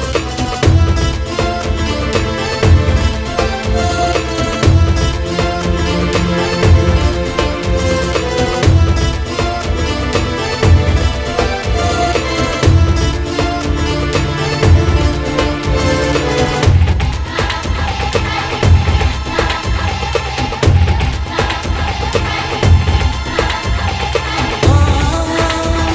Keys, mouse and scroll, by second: 2.1 click, 2.3 shift+middle click, 2.4 shift+a, 2.7 middle click, 3.1 scroll up 3, 3.4 shift+middle click, 3.9 scroll up 1, 4.1 shift+middle click, 4.4 r, 6.0 s, 7.0 g, 8.8 Tab, 9.0 scroll up 3, 9.3 scroll down 1, 10.7 ctrl+r, 11.7 ctrl+b, 12.7 click, 13.2 s, 14.4 click, 14.6 s, 17.0 ctrl+r, 17.6 s, 20.6 ctrl+r, 22.4 click, 22.8 KP_3, 23.6 KP_3, 24.7 click, 25.3 g.